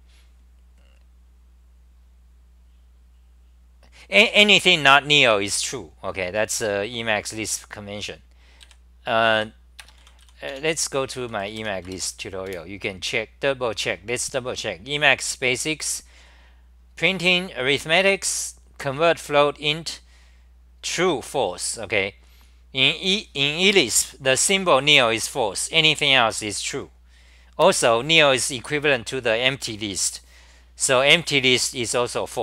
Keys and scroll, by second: 5.2 g, 8.6 ,, 9.4 i, 11.9 Return, 12.5 super+r.